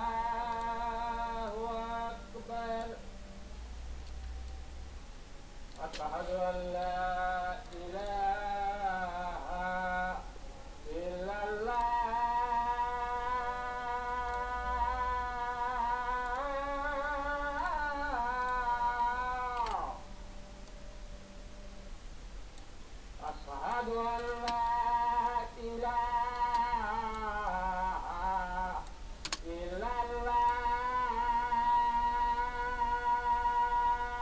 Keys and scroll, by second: 4.6 ctrl+space, 8.1 ctrl+space, 24.2 ctrl+t, 25.0 ctrl+shift+t.